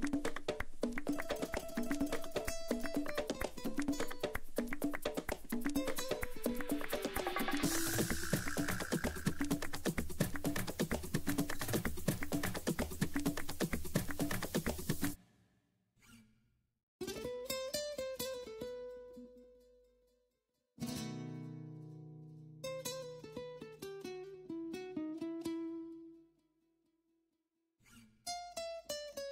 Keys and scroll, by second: 14.1 Up, 19.9 F12.